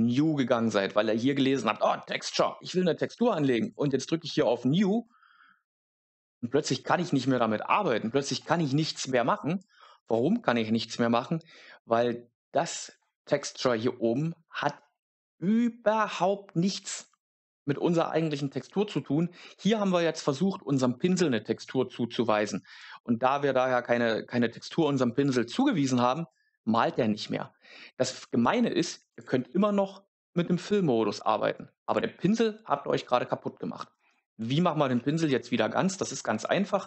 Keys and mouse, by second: 5.0 click, 8.4 click, 28.3 click, 31.8 click.